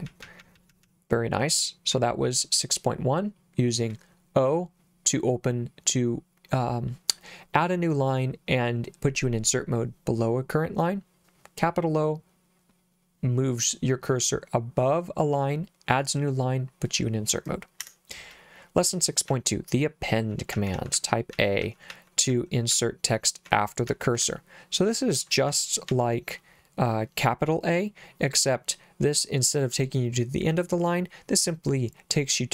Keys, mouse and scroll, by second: 0.1 j, 0.4 j, 0.5 j, 2.5 k, 19.3 j, 20.5-22.7 typing, 23.9 j, 24.2 k, 25.5 k, 25.9 k.